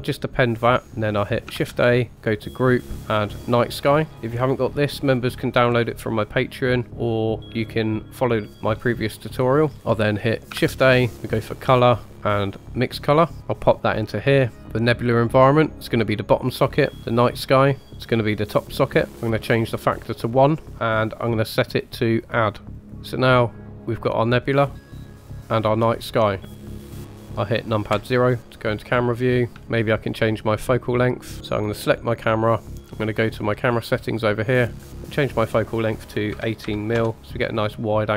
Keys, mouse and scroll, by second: 1.5 shift+a, 9.6 scroll down 1, 9.7 middle click, 10.5 shift+a, 14.8-17.2 drag, 19.8 click, 21.9-22.9 drag, 23.4-27.5 middle drag, 27.9 KP_0, 28.9-29.5 scroll down 2, 29.5 shift+middle click, 29.5-30.3 scroll up 2, 31.8 click, 33.7 click, 35.0-37.0 drag.